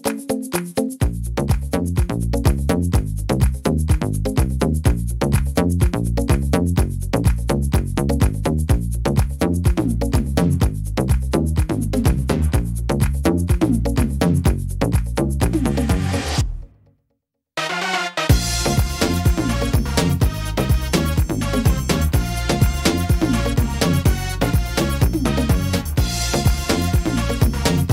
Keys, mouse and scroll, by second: 0.4 click, 0.4 s, 3.3 click, 5.1 middle click, 6.3 ctrl+r, 7.9 middle click, 8.8 ctrl+r, 13.0 right click, 14.6 click, 17.2 middle click, 18.0 scroll up 2, 18.4 middle click, 19.2 ctrl+r, 20.5 middle click, 21.5 s, 23.0 middle click, 23.5 scroll down 2, 24.0 middle click, 24.4 scroll up 2, 26.0 right click, 27.0 ctrl+r.